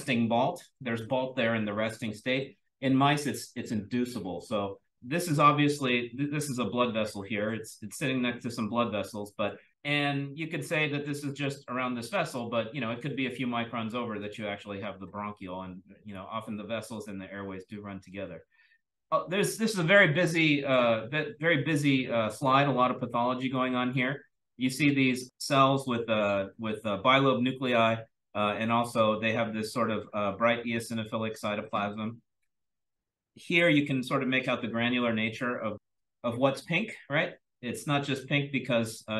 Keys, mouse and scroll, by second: 5.3-8.2 scroll up 1, 8.2-9.7 scroll up 1, 9.4 click, 9.7-12.1 scroll down 1, 12.1-12.7 scroll down 1, 12.7-14.1 scroll down 1, 14.1-15.4 scroll down 1, 15.4 click, 15.4-18.9 scroll down 1, 18.9-22.1 scroll down 1, 22.1-23.5 scroll down 1, 23.5-24.1 drag, 23.5-24.8 scroll up 1, 24.8-29.2 scroll up 1, 29.2-30.0 scroll up 1, 30.0-31.7 scroll up 1, 31.7-32.6 scroll up 1, 32.6-33.2 scroll up 1, 33.2-33.6 drag, 33.2-35.1 scroll up 1, 35.1-35.7 scroll up 1, 35.7-39.1 scroll up 1.